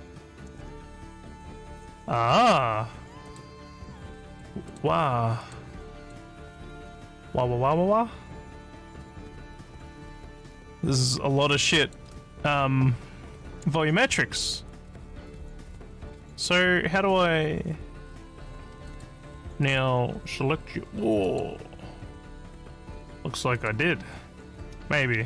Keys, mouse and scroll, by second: 3.3 click, 4.2 click, 4.7 click, 5.4 click, 6.0 click, 11.8 click, 16.4 click, 16.6 click, 18.9 click, 19.6 click, 21.2 click, 23.5 click, 25.2 alt+scroll up 1.